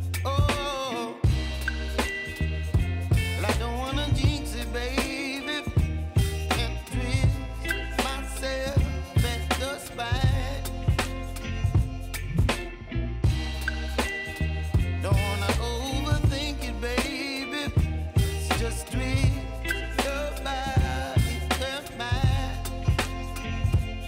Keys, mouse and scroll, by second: 1.8 u, 2.7 -, 4.6 click, 6.1 ctrl+n, 6.3-11.2 typing, 8.1 ctrl+a, 11.4 Return, 13.0 ctrl+i, 14.4 click, 15.0 Return, 16.2-17.7 drag, 17.7 s, 18.2-20.0 drag, 21.6-23.5 typing.